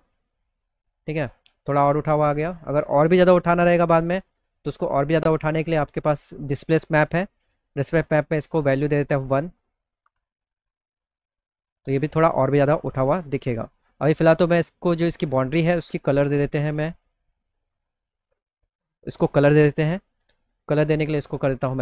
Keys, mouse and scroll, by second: 3.4 click, 4.7-5.9 drag, 7.2 click, 8.5 click, 9.2 click, 9.5 1, 9.9 click, 11.8 middle click, 12.2 middle click, 12.5 alt+middle click, 13.0 middle click, 13.6 click, 19.8 click.